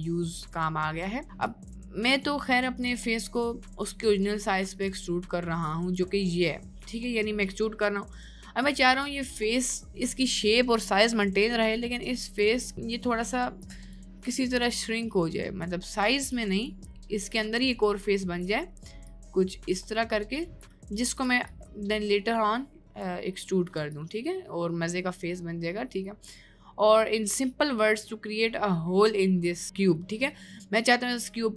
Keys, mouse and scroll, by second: 0.3 click, 1.5-6.0 drag, 11.5 click, 12.4 click, 13.7 click, 14.3 click, 15.7 click, 16.3 click, 17.3 click, 18.2 click, 19.1-20.8 drag, 21.2 click, 21.5-23.1 drag, 24.0-31.5 ctrl+drag.